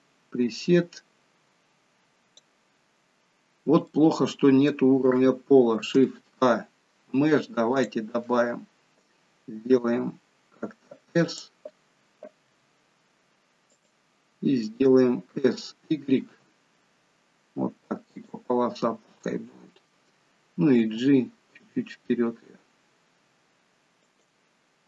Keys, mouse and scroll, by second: 4.0 middle click, 5.8 shift+a, 9.7 s, 12.5 s, 18.8-19.3 scroll down 2, 19.3 middle click, 20.9 g.